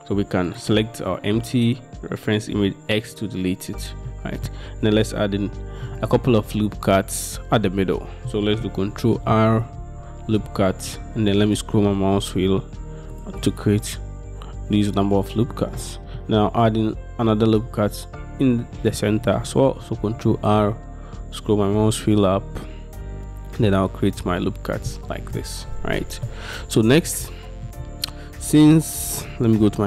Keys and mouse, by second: 2.6 x, 4.2 middle click, 9.2 ctrl+r, 15.9 middle click, 20.2 ctrl+r, 25.4 middle click, 27.3 shift+middle click.